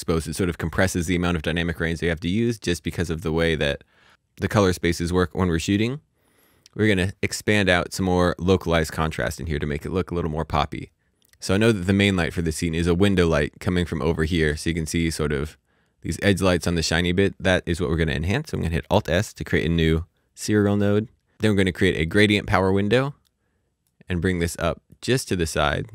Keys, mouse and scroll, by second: 2.0 click, 7.9 click, 10.4-11.1 scroll down 1, 18.1 click, 19.6 click, 22.3 click, 25.8 click.